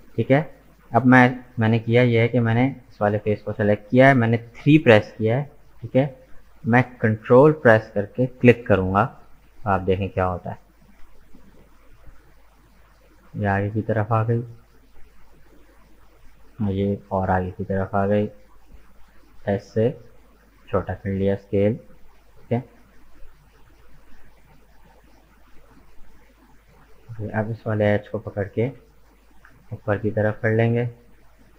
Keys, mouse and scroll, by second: 2.2-3.4 middle drag, 3.4 right click, 4.7 KP_3, 9.4-12.4 ctrl+drag, 12.4 s, 16.0-18.2 ctrl+drag, 18.2 s, 20.9-22.7 middle drag, 22.7 scroll up 2, 23.1-24.9 middle drag, 24.9-26.1 drag, 26.1 right click, 26.4-28.3 middle drag, 28.3 g.